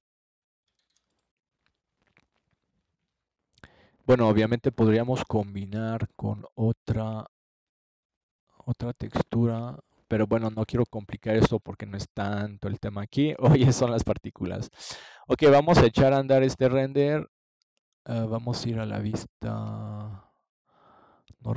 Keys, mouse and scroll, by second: 5.7 click, 17.0 middle click, 18.3-19.4 middle drag.